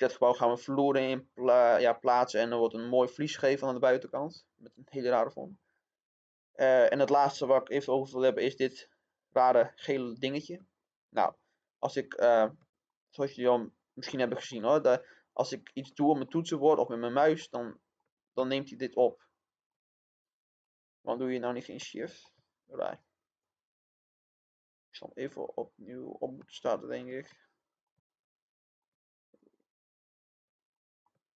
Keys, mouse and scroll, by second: 7.0-23.4 middle drag, 23.4 click, 27.2 middle click, 28.1 scroll down 1, 28.2 middle click, 29.3 click, 30.6 middle click.